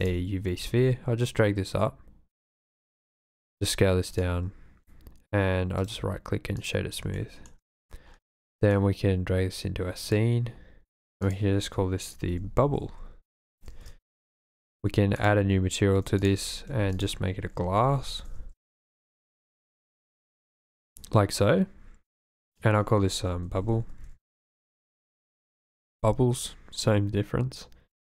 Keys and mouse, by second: 0.5 g, 2.9 click, 3.2 s, 4.2 click, 5.8-6.7 drag, 7.2 shift+middle click, 11.1 click, 11.3 click, 12.8-13.9 shift+drag, 12.8 shift+b, 15.2 click, 16.2 click, 16.3 x, 16.8 shift+a, 18.3 s, 20.5-20.9 drag, 22.5-24.4 drag, 23.7 shift+b, 24.4 shift+middle click, 25.7 click.